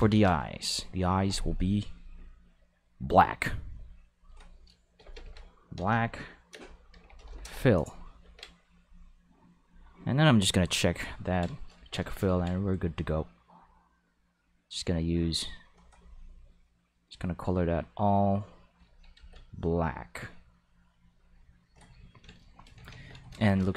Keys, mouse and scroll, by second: 0.1 ctrl+s, 0.8 click, 1.9 click, 3.6 click, 4.1 click, 5.0-7.2 typing, 7.4 Return, 8.2 ctrl+s, 9.6 click, 10.3 click, 13.4-15.6 drag, 16.9-18.8 drag, 19.1 ctrl+z, 19.5-21.6 drag, 22.9 ctrl+s, 23.3 shift+click.